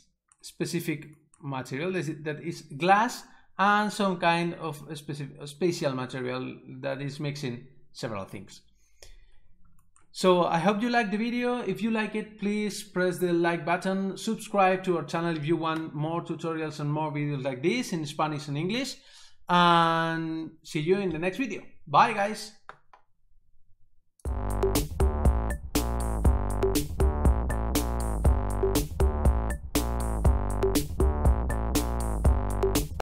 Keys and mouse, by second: 24.2 click.